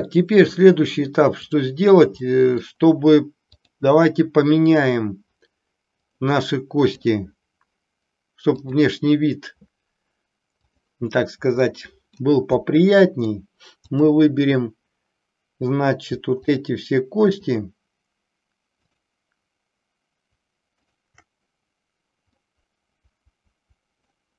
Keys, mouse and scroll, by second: 2.2 middle click, 3.5-5.2 drag, 5.9 click, 8.5-10.9 drag, 12.2-13.5 middle drag, 13.9-15.5 drag, 16.4-18.4 shift+drag, 23.1-24.1 middle drag.